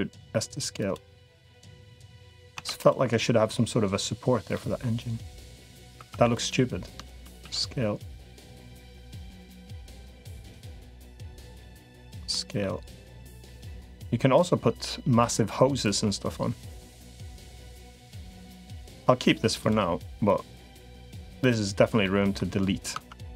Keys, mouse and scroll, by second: 1.4 middle click, 2.5 Tab, 4.3-5.5 middle drag, 5.9 Tab, 7.3 s, 12.1 middle click, 12.9-14.3 drag, 15.7-19.1 drag, 20.1 click, 21.8 middle click, 22.7 Tab, 23.3 Tab.